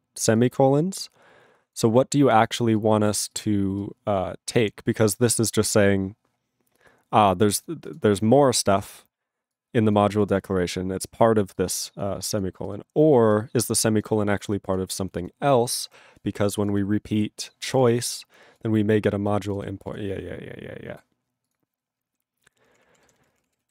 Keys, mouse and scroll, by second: 15.2 ctrl+s, 15.2 click, 15.5-16.0 scroll up 1, 16.6 click, 16.6 click, 16.8 double click, 17.6 click, 17.8 double click, 17.8 double click, 18.5 click, 19.2 click, 19.4 click, 19.5 click, 19.5 double click, 19.6 double click, 19.8 click, 19.9 click, 20.2 scroll down 1, 21.4 click, 21.5 click, 22.7 ctrl+p, 23.0 ctrl+n, 23.3 ctrl+space, 23.4 ctrl+p, 23.4 ctrl+e, 23.6 ctrl+b.